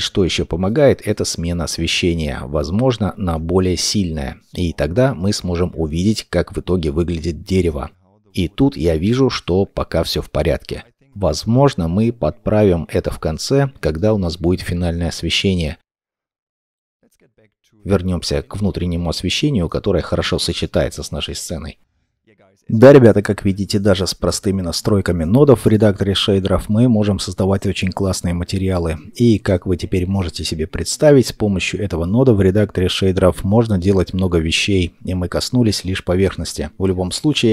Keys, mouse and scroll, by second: 5.1 middle click, 7.3-7.7 scroll, 7.7 middle click, 7.9 scroll up 1, 10.5 middle click, 19.2 middle click, 20.8 middle click.